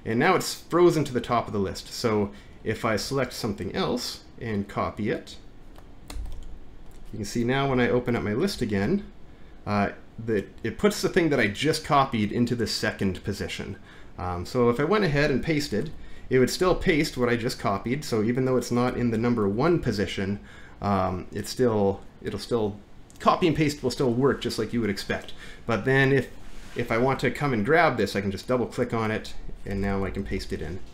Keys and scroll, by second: 6.1 ctrl+c, 8.5 alt+`, 15.9 ctrl+v, 19.5 alt+`, 29.7 Return, 29.9 Return, 30.2 ctrl+v.